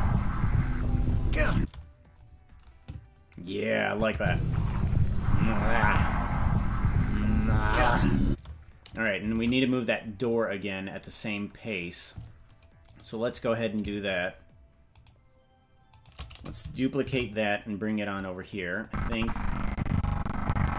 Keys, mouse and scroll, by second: 1.5 space, 3.9 click, 4.1 space, 8.2 space, 9.3 ctrl+Tab, 10.3-11.3 right drag, 11.3-12.4 scroll down 1, 12.8 scroll down 2, 12.8-16.5 right drag, 17.0 shift+d, 18.8-20.7 drag.